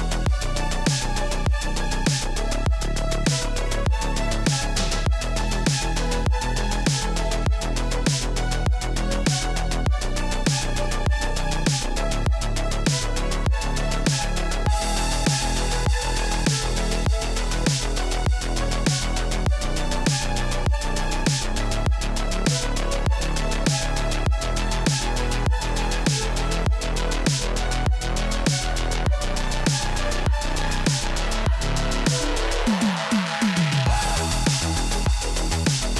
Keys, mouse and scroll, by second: 0.4 click, 1.1 click, 1.2 ctrl+v, 1.5 click, 2.2 click, 3.0 click, 3.2 ctrl+v, 3.5 click, 4.7 click, 6.1 click, 7.0 click, 9.2 click, 9.7 click, 10.4 click, 11.3 click, 11.9 click, 13.1 scroll, 15.1 click, 15.4 click, 15.5 4, 16.9 click, 21.2 click, 22.3 click, 23.1 click, 23.9 click, 25.3-27.4 typing, 26.7 Tab, 27.7 Return, 28.7-30.3 typing, 29.2 click, 30.0 click, 30.6 scroll down 1, 30.6 scroll, 31.2 scroll down 2, 31.3 scroll, 32.2 click, 33.4 click, 35.1 scroll down 5, 35.3 click.